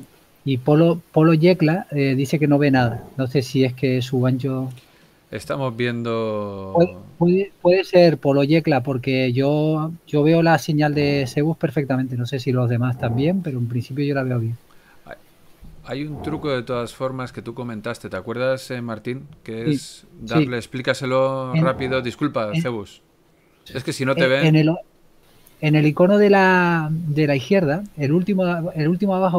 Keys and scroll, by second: 14.0 n, 18.0 n.